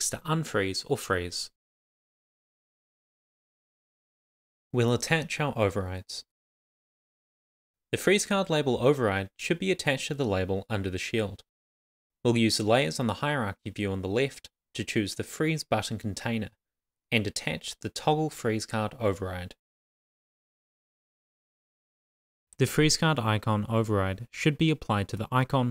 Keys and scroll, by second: 0.0 Left, 0.6 shift+f, 0.7 super+s.